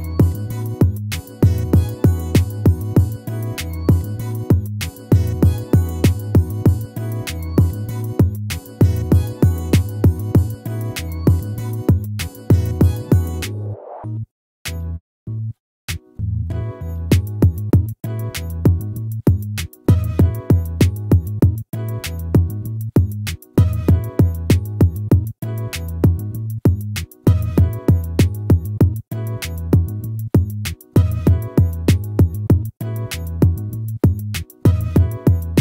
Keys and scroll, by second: 7.2 ctrl+-, 21.3 ctrl++, 35.5 ctrl+-.